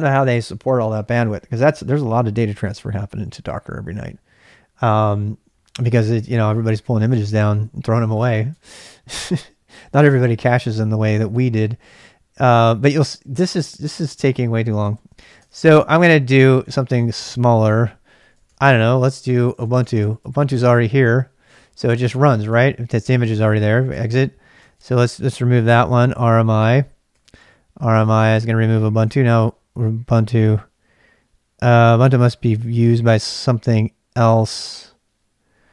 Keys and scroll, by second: 14.9 ctrl+c, 15.3-20.5 typing, 21.5 ctrl+[, 21.8-29.4 typing, 29.1 ctrl+[.